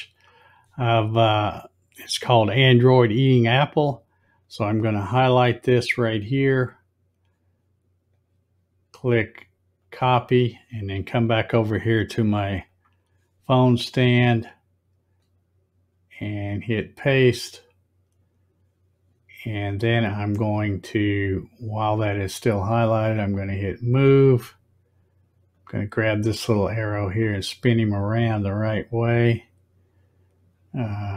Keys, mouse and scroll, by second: 0.2 click, 4.5-6.8 drag, 8.2 right click, 9.9 click, 12.7 click, 15.2 right click, 17.5 click, 23.1 click, 25.6-29.4 drag.